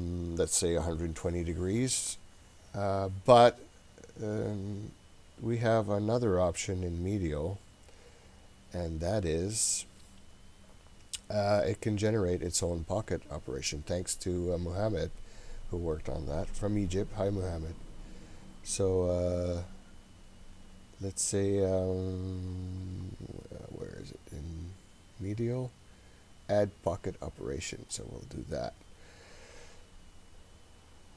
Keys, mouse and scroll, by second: 6.5-8.1 scroll down 7, 8.1-8.8 scroll down 1, 8.8-10.1 scroll down 3, 10.1-10.8 scroll down 1, 18.9-19.8 scroll down 2, 19.8-20.6 scroll down 2, 20.6-21.4 scroll down 4, 22.5-24.9 scroll up 10, 28.0 click, 28.8-30.9 scroll up 11, 30.9-31.1 scroll down 1.